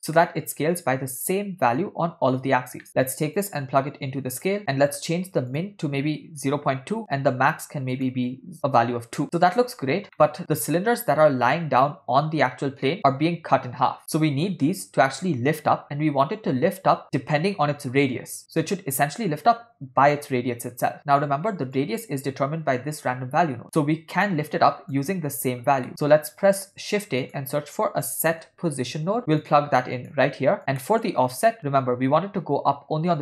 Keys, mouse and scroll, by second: 0.2 ctrl+middle click, 2.9 middle click, 3.4-4.6 drag, 4.6 middle click, 5.0-5.5 scroll down 1, 5.6-7.0 drag, 8.0 click, 10.2 shift+middle drag, 21.9-25.0 drag, 25.9 middle click, 26.6 shift+a, 30.6 click, 30.9 middle click.